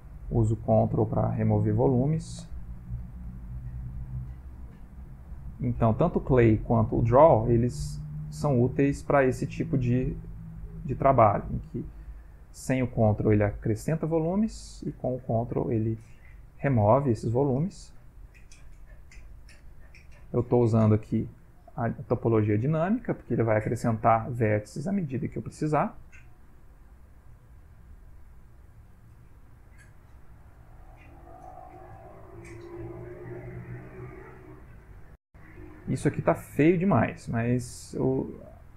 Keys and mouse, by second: 0.2 ctrl+click, 0.6 ctrl+click, 1.4 ctrl+click, 2.4 ctrl+click, 2.7 ctrl+click, 3.0 ctrl+click, 3.3 ctrl+click, 3.6 ctrl+click, 4.1 ctrl+click, 4.5 ctrl+click, 4.8 ctrl+click, 5.2 middle click, 5.5 middle click, 6.8 ctrl+click, 7.2 ctrl+click, 7.7 ctrl+click, 8.2 ctrl+click, 8.7 ctrl+click, 9.2 ctrl+click, 10.1 ctrl+click, 10.4 ctrl+click, 10.8 ctrl+click, 11.4 click, 11.8 click, 12.3 click, 12.6 click, 13.0 click, 13.5 click, 14.0 click, 15.0-16.5 ctrl+click, 15.7 click, 16.2 click, 16.7 click, 17.2 middle click, 18.5 click, 19.2 click, 19.6 click, 20.1 click, 20.5 click, 20.8 click, 22.1 click, 22.5 click, 22.8 click, 23.1 middle click, 23.8 click, 24.1 click, 28.2 click, 28.7 click, 29.1 click, 29.6 click, 30.0 middle click, 30.5 click, 30.9 click, 31.4 click, 32.1 ctrl+click, 32.5 ctrl+click, 33.0 ctrl+click, 33.3 ctrl+click, 33.8 ctrl+click, 34.2 middle click, 35.1 ctrl+middle click, 35.7 middle click, 37.4 f, 38.2 g, 38.5 click.